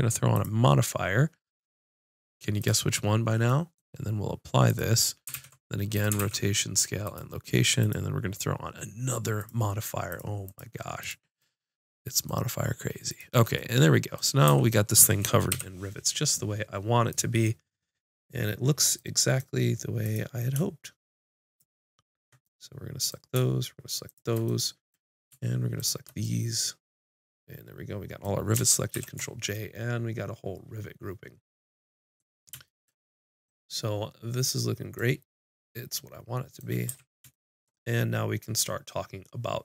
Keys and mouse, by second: 0.3-1.4 drag, 4.7-6.0 drag, 5.3 ctrl+a, 6.2 ctrl+a, 10.1-14.7 drag, 14.5 a, 15.5 KP_5, 20.0-21.0 drag, 22.4-26.1 drag, 26.7-27.7 drag, 28.9 ctrl+j, 36.9 a.